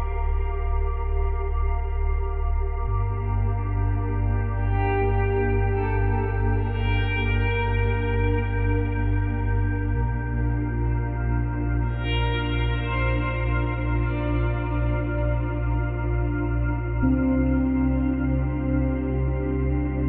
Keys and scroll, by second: 8.9 space, 9.6 space.